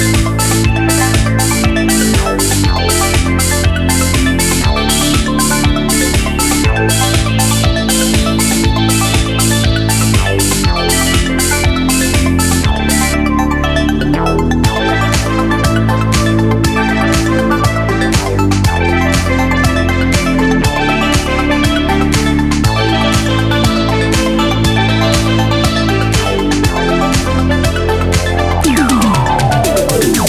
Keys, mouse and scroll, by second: 1.8 KP_7, 1.9 click, 5.3 super+click, 6.9 click, 7.1 KP_3, 8.5 click, 9.4 Tab, 11.3 click, 14.7 super+z, 15.1 g, 15.2 super+z, 15.3 shift+a, 15.8 KP_7, 16.5 super+a, 16.6 click, 17.1 KP_7, 17.3 click, 17.9 super+z, 18.0 KP_7, 18.1 click, 18.3 super+z, 18.9 KP_7, 19.0 click, 19.1 super+z, 19.2 click, 19.3 super+z, 19.6 s, 19.6 Tab, 20.9 super+z, 21.1 click, 21.3 super+z, 21.3 click, 21.8 super+z, 21.8 click, 22.8 super+z, 23.1 click, 24.3 click, 24.3 KP_7, 25.0 click, 27.6 KP_7, 28.0 super+click, 28.1 KP_7, 28.1 click, 28.7 super+z, 28.8 click, 29.9 super+z, 30.0 click.